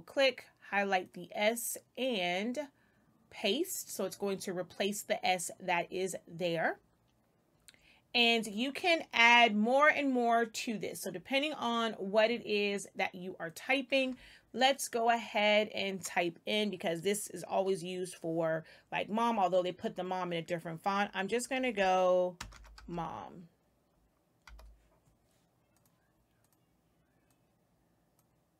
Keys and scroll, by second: 22.2-23.2 typing, 24.4 m.